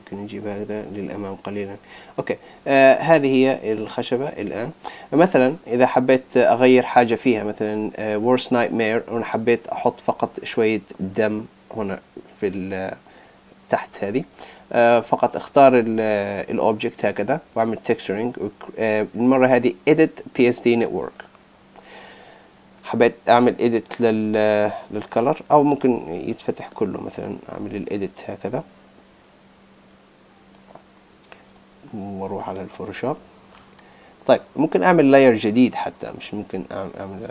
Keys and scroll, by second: 31.7 super+Tab.